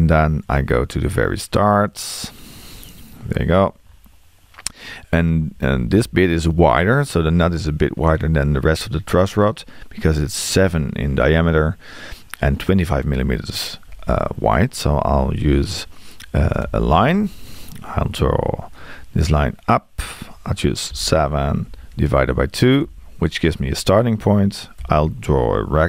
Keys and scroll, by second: 16.6 l, 20.9 7.